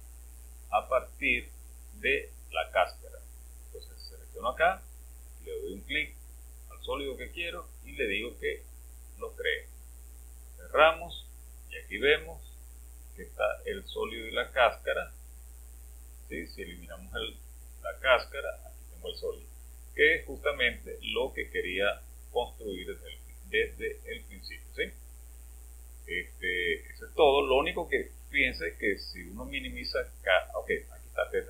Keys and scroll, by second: 17.1 space.